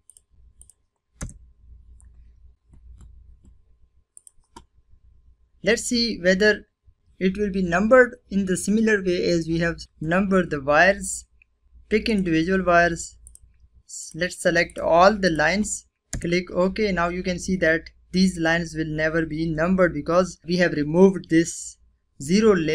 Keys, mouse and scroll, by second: 0.0 Return, 3.0 click, 9.8 click, 10.8 click, 14.9 Return, 16.5-17.4 scroll up 2, 17.4-18.0 scroll up 1, 18.5 scroll down 1.